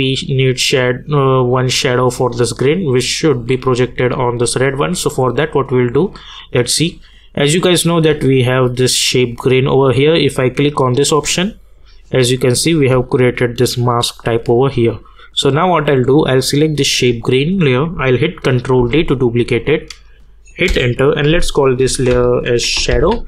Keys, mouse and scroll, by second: 5.6 click, 10.8 click, 18.8 ctrl+d, 20.7 Return, 21.6-23.2 typing.